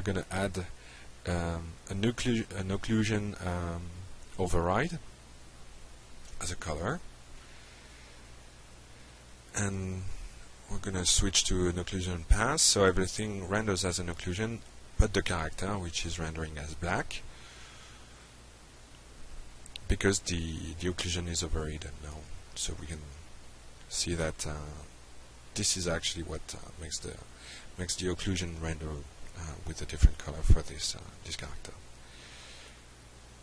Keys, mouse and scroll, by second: 0.0-1.1 typing, 2.7-3.3 typing, 4.7 click, 5.8 click, 6.8 click, 8.8 click, 9.8 click, 10.4 click, 18.1-18.6 drag, 23.2 click, 24.2 u, 30.6 click, 32.0 click, 32.5 u, 33.1 u.